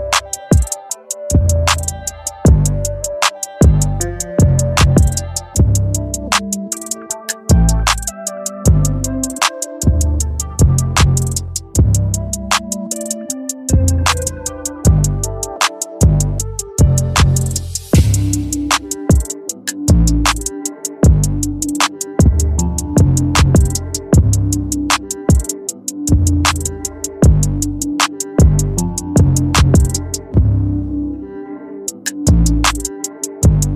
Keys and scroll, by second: 3.1 [, 12.7 ].